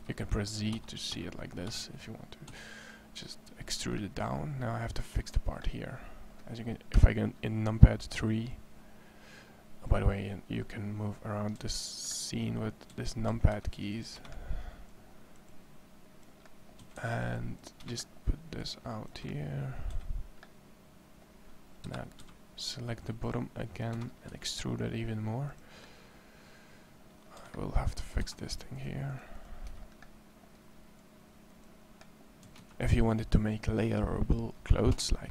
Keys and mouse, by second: 0.0-2.3 typing, 6.7 KP_3, 11.4 a, 12.7 a, 13.3 a, 13.4 c, 16.6 a, 16.7 c, 19.9 a, 21.6 KP_3, 22.0 c, 24.1 e, 27.2 a, 28.0 c, 32.2 a, 32.4 c.